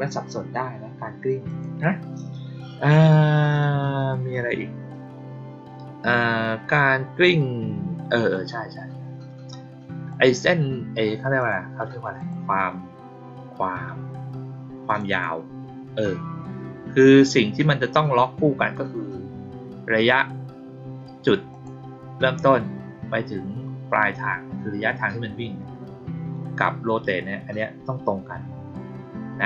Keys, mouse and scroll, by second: 1.4 click, 8.2 click, 10.0 click, 11.3 click, 12.1 click, 14.8 click, 15.0 click, 21.4 click.